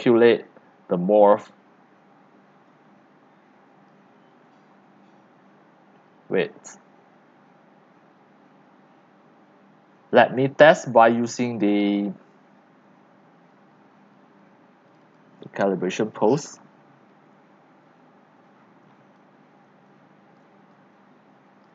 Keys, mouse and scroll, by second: 10.7 click, 14.8 click, 15.7-18.5 drag, 18.5 scroll down 6, 18.7 middle click, 19.0-21.7 typing, 21.6 click.